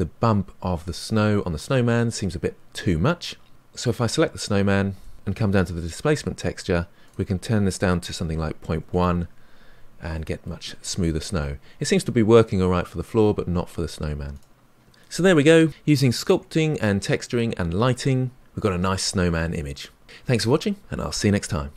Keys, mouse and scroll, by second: 3.5 click, 9.0-10.1 drag, 10.1-14.3 middle drag, 14.3 click, 14.6-21.7 middle drag.